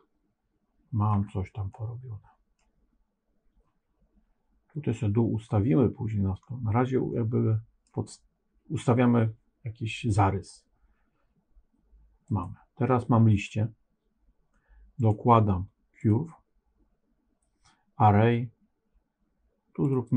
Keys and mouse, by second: 1.7 middle click, 7.1 middle click, 12.2 click, 14.9-16.0 drag, 19.9-20.1 drag.